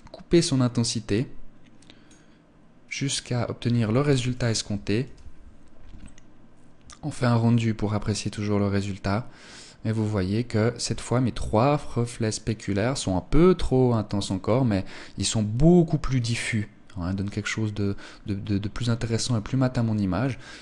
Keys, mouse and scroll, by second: 3.4 ctrl+s, 18.3 Escape, 19.6 click.